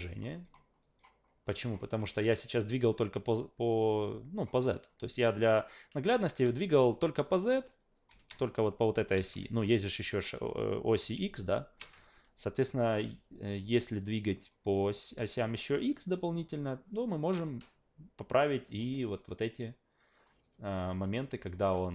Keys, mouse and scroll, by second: 0.3 alt+right click, 0.5 alt+middle click, 0.8 alt+right click, 1.3 alt+middle drag, 1.5 alt+right drag, 1.8 alt+click, 4.0 click, 4.7 alt+middle click, 6.0 alt+middle drag, 7.7 click, 8.1 w, 8.3-9.1 shift+middle drag, 9.4 ctrl+z, 10.1 click, 10.7 click, 11.0 w, 11.2-11.8 shift+middle drag, 12.0 ctrl+z, 12.2 ctrl+z, 12.9 click, 13.1 ctrl+z, 14.4 click, 14.8 alt+middle click, 15.0 a, 16.8-18.8 drag, 19.0 alt+right click, 19.3-20.2 alt+drag, 20.7-21.1 alt+drag, 21.4 alt+click.